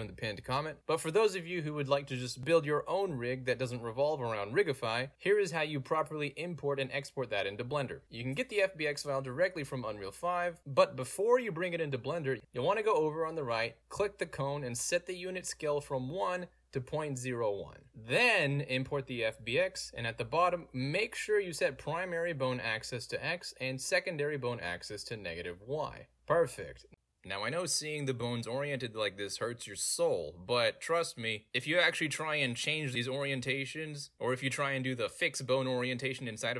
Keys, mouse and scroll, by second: 5.2 click, 8.1 click, 8.6 middle click, 9.1 middle click, 9.1-9.4 scroll up 2, 9.8 click, 10.7 click, 11.6 click, 13.3 click, 13.9 click, 14.7 click, 16.3 0, 16.7 1, 16.9 Return, 18.4 click, 19.7 click, 19.7 scroll down 1, 19.8 click, 20.6 middle click, 20.6-20.9 scroll down 2, 21.3 click, 21.5 middle click, 21.6 scroll down 2, 21.8 middle click, 22.4 click, 23.0 click, 23.5 click, 24.8 click, 25.7 click, 26.3 Delete, 27.3 click, 28.1-29.2 middle drag, 29.5 Delete, 34.4 click, 35.7 click.